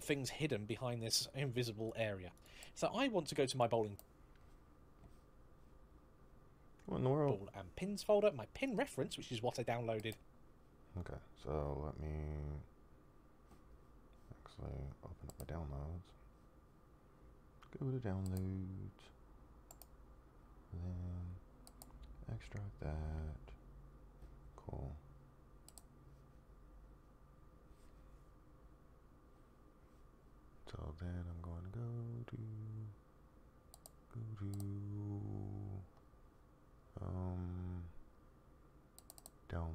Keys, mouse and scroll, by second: 0.5 click, 4.2 click, 8.3 click.